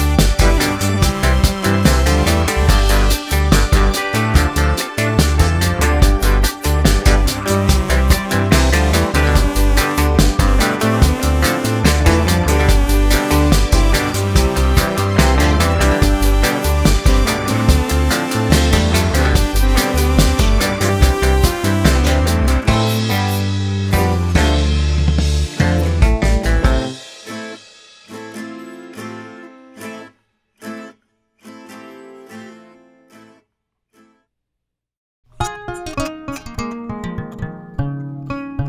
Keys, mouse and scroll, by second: 1.2 scroll down 1, 1.3-8.0 middle drag, 10.4 scroll up 2, 10.5 middle click, 10.7 scroll down 1, 12.8 click, 13.1 middle click, 13.9 click, 14.7-26.3 middle drag, 26.3-27.9 drag, 27.9 middle click, 28.2 scroll up 1, 28.4 middle click, 29.1-30.4 drag, 30.4-31.5 middle drag, 31.5 click, 32.1-33.2 middle drag, 33.2-36.0 drag, 36.0-37.2 middle drag, 37.2-38.6 drag.